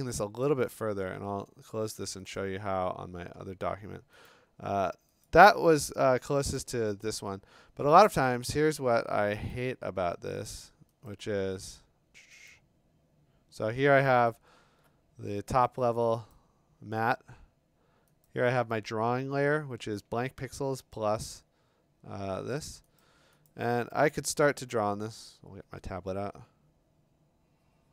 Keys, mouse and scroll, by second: 1.1 ctrl+w, 1.1-1.6 scroll, 2.4 click, 4.3 click, 5.3 click, 6.6 click, 7.0 click, 9.5 click, 11.1 click, 12.5 click, 14.3 middle click, 14.3 middle click, 14.4 middle click, 15.7 click, 16.3 click, 17.1 click, 17.1 scroll, 18.3 click, 23.0 click, 23.5 click, 23.6 b.